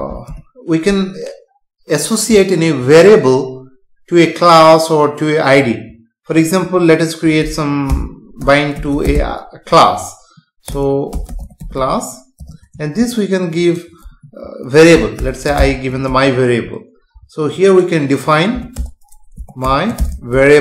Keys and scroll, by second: 0.2 BackSpace, 14.1 Left, 18.7 Return.